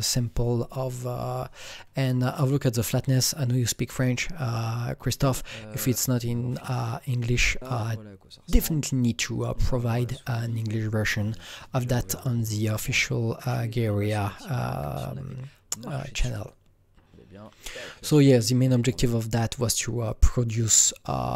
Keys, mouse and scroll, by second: 2.5 KP_Enter, 2.5 ctrl+v, 2.5 click, 5.0 click, 5.1 KP_Enter, 5.9 click, 10.5 click, 12.9 click, 16.4-18.9 click, 19.6 click.